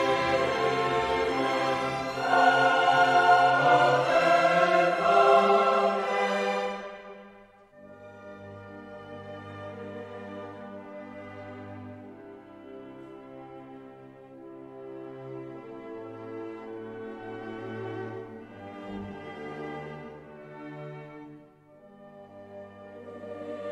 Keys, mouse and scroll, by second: 0.0 click, 1.7 ß, 2.4 click, 4.1 0, 5.8 click, 6.9 click, 7.8 1, 8.6 click, 9.7 0, 10.3 click, 11.6 click, 14.0 click, 15.0 click, 16.7-19.0 drag, 19.6 middle click, 20.4-20.9 scroll down 2, 20.9 middle click, 21.0-21.5 scroll up 2, 21.5 middle click, 21.6-22.4 scroll up 4, 22.6-23.3 scroll up 4, 23.5-23.7 scroll down 3.